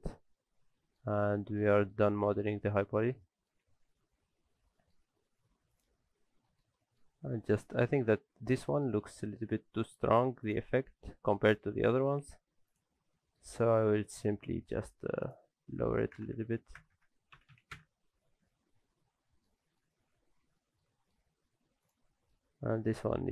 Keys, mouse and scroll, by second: 1.2 shift+middle click, 1.8 scroll down 2, 2.1 shift+middle click, 2.5-3.0 scroll up 6, 3.0 middle click, 3.2 shift+middle click, 4.0 ctrl+space, 4.7 shift+middle click, 5.0-5.7 scroll up 1, 5.7 click, 6.0-6.4 scroll up 2, 6.4 middle click, 6.7 middle click, 7.1 scroll up 1, 7.8 shift+middle click, 8.2-8.7 scroll down 4, 8.7 middle click, 9.0 shift+middle click, 9.3-9.7 scroll up 5, 9.9 shift+middle click, 10.4 click, 11.5 scroll down 4, 11.6 shift+middle click, 12.4-12.8 scroll up 3, 12.7 click, 13.1 middle click, 13.4 scroll up 1, 13.8 middle click, 14.1 shift+middle click, 15.2 click, 16.9 KP_0, 18.8-19.5 scroll down 6, 19.3 middle click, 19.6 shift+middle click, 20.2 alt+a, 20.4 scroll down 2, 20.6 middle click, 20.9 shift+middle click, 21.3 scroll up 1, 21.8 click, 21.8 scroll up 2, 22.1 shift+middle click, 22.4-23.0 scroll up 2, 22.8 middle click, 23.1 shift+middle click.